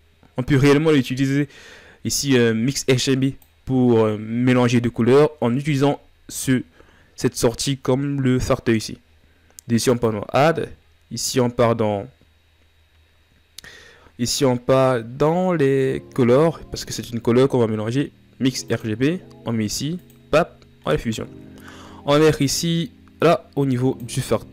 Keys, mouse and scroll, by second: 10.6-15.4 drag, 20.8-22.7 middle drag, 22.7-23.0 scroll up 5, 23.0 click.